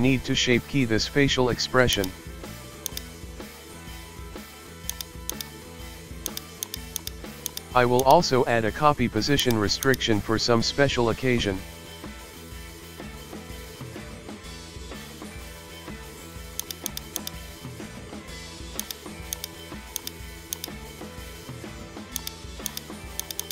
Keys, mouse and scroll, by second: 2.9 Right, 4.0 g, 5.3 right click, 6.3 click, 6.6 drag, 7.4-9.0 drag, 9.4 click, 9.8 click, 11.6-13.2 middle drag, 13.6 middle click, 14.5 scroll down 1, 14.6-16.2 middle drag, 16.6 click, 16.9 click, 17.2 click, 18.8 click, 19.4 click, 20.0 click, 20.5 click, 22.2-23.2 drag, 23.4 click.